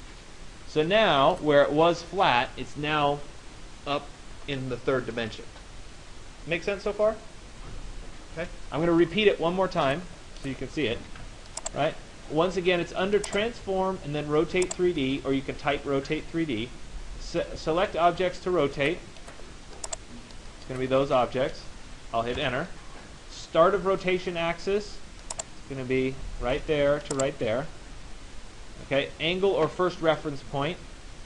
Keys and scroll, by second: 10.6 ctrl+z, 22.0 Return.